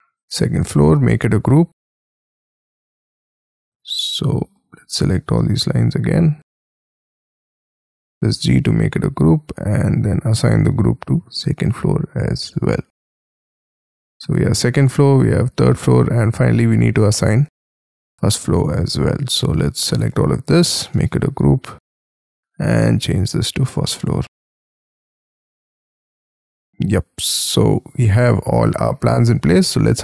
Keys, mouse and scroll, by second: 1.1 g, 3.7 double click, 8.1 g, 16.5-17.5 scroll down 21, 17.5-18.8 scroll up 25, 18.9 scroll down 5, 21.0 g, 25.9 double click, 26.9-28.5 scroll down 30, 28.5-30.0 scroll up 11.